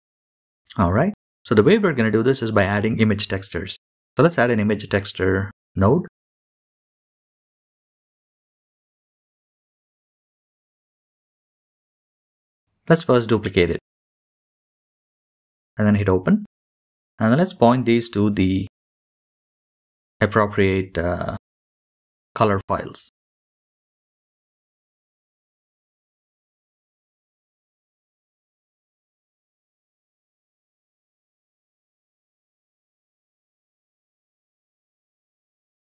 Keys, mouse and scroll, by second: 0.9-3.1 drag, 3.1 shift+a, 10.0-11.5 drag, 11.5 shift+d, 14.5 click, 35.0 click, 35.3 click.